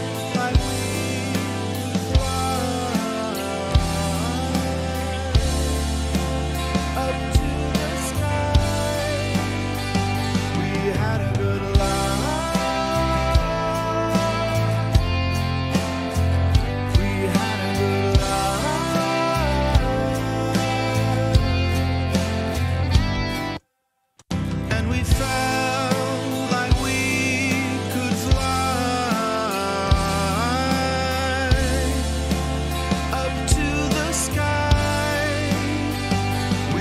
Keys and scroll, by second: 25.2 space.